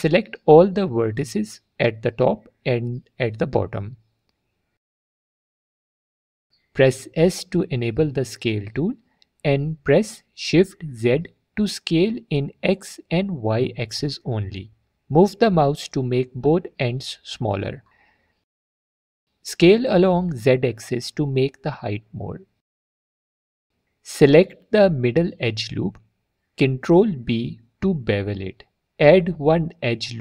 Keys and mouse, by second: 0.2 1, 0.7 click, 2.7 shift+click, 4.5 click, 7.3 s, 8.3 shift+z, 19.7-21.9 middle drag, 19.9-21.9 drag, 22.2 middle click, 24.6 2, 25.4 click, 25.5 click, 26.0 middle click, 26.7 middle click, 27.5 ctrl+b.